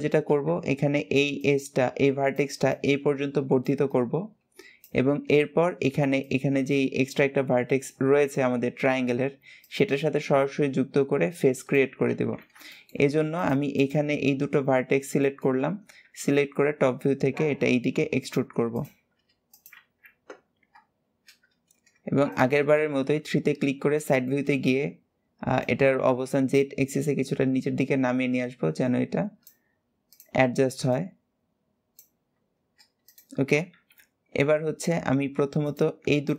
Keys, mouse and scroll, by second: 12.5 shift+middle click, 13.1 click, 13.6 shift+click, 14.1-15.0 shift+scroll up 5, 15.0 shift+middle click, 15.4-15.8 scroll up 1, 15.8 e, 18.5 click, 18.8 g, 19.6 alt+z, 20.2-22.1 scroll up 2, 22.1 shift+click, 22.7 KP_3, 23.4-23.8 scroll up 1, 23.8 shift+middle click, 24.4-25.4 scroll up 3, 25.4 click, 29.9 click, 30.8 click, 32.8 click, 33.7 KP_7, 34.5-35.4 scroll down 3, 35.4 click, 36.0 shift+click.